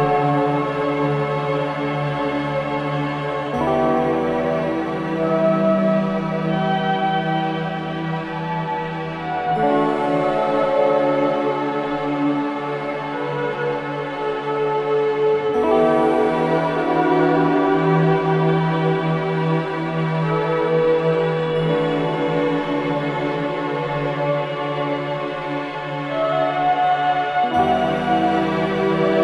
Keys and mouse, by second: 2.9 click, 4.0 g, 4.3 x, 4.8 click, 6.5 i, 7.4 Escape, 8.6 i, 9.1 click, 10.1 click, 10.5 space, 11.7 space, 12.1-14.0 drag, 14.0 space, 15.3 space, 16.0-19.1 drag, 19.7 ctrl+alt+click, 21.2 click, 22.5 Left, 23.6 i, 24.2 click, 25.4 Right, 25.8 Right, 26.0 Right, 28.2 s.